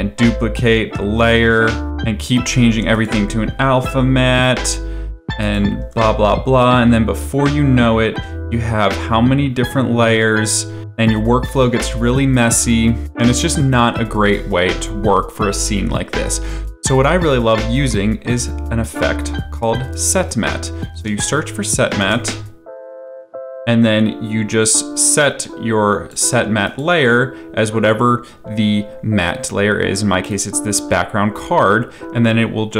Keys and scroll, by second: 1.5 ctrl+z, 5.9 ctrl+d, 16.5 ctrl+z, 21.0 ctrl+s, 22.0 t, 22.1 space.